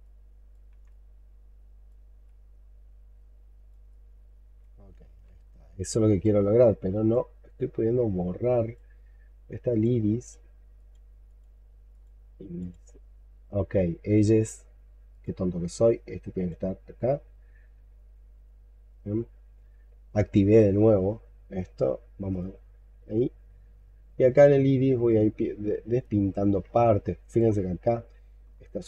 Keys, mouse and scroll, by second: 2.0 x, 4.9 ctrl+z, 5.3-5.6 ctrl+scroll up 1, 5.7 alt+click, 6.3-11.6 alt+scroll up 5, 26.2-26.5 scroll down 6, 26.7 alt+click, 28.7 alt+scroll down 1.